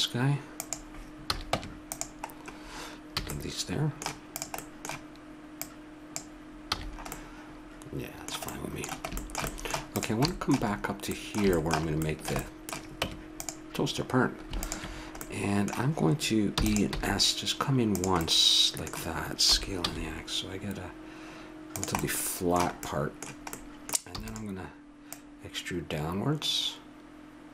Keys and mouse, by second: 1.2 a, 1.5 Tab, 3.2 a, 4.3 right click, 5.7 right click, 6.9 a, 7.7-10.1 middle drag, 10.1 right click, 11.2 click, 13.0 Tab, 13.7 middle click, 14.6-16.9 drag, 16.5 e, 16.9 s, 18.2-20.0 middle drag, 19.5 s, 22.0 middle click, 24.1 e, 25.1-26.8 drag.